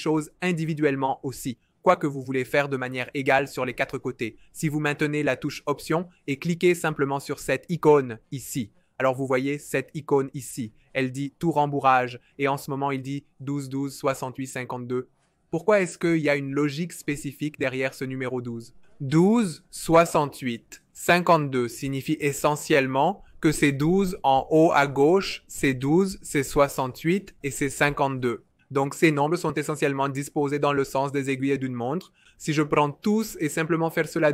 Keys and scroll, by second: 33.8-34.3 typing.